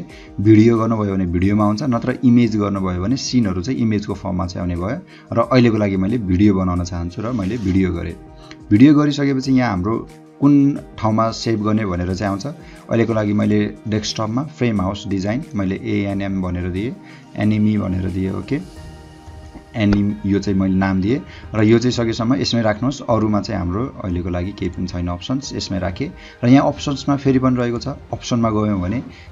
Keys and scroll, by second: 15.5-17.7 typing, 19.3 BackSpace.